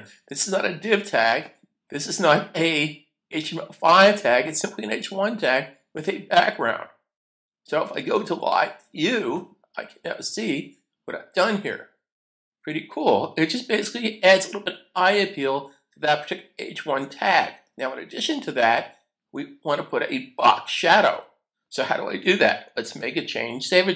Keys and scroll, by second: 23.0 super+s.